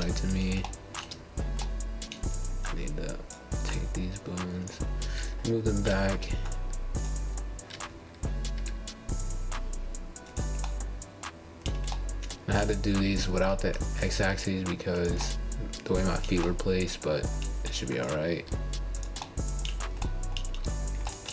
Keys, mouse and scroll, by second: 0.3 g, 1.5-4.1 middle drag, 4.6-5.1 scroll down 1, 5.4 middle click, 5.9 click, 6.2 g, 7.0-8.2 middle drag, 8.2-8.8 scroll down 3, 8.8-10.1 shift+middle drag, 8.8 scroll, 10.1 scroll down 1, 11.0-11.7 scroll up 6, 11.9 middle click, 12.9-13.4 scroll down 4, 13.5-18.3 middle drag, 18.3-20.3 scroll down 1, 20.3-21.0 scroll down 1, 21.0 scroll down 1, 21.1-21.3 scroll up 4.